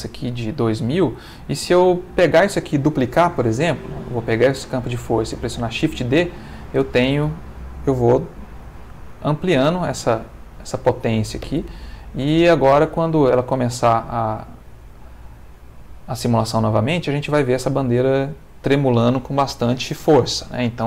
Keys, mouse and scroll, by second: 5.3 shift+d, 6.3 click, 9.6 shift+d, 10.7 click.